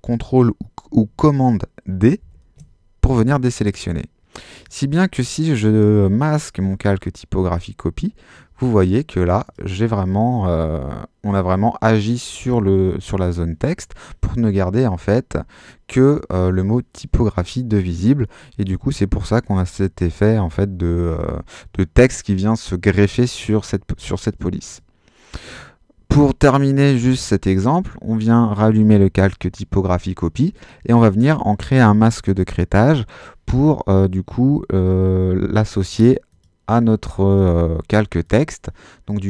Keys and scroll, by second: 2.2 super+d.